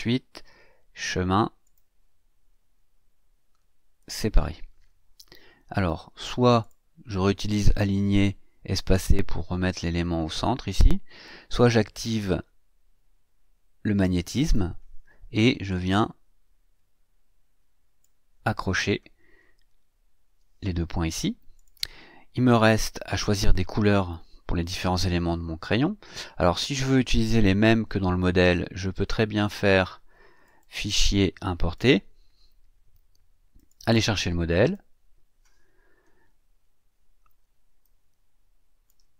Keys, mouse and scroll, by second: 1.6 click, 4.0 click, 5.7 click, 6.6 click, 7.1-11.4 drag, 14.3 click, 15.9-18.2 drag, 19.7-20.2 ctrl+scroll up 2, 21.5 click, 22.7-23.0 ctrl+scroll down 2, 25.5 click, 26.4-27.6 shift+scroll up 4, 30.4 click, 31.7 click, 33.5 click, 34.6 click, 36.2-37.0 ctrl+scroll down 4, 37.8-39.1 ctrl+shift+drag.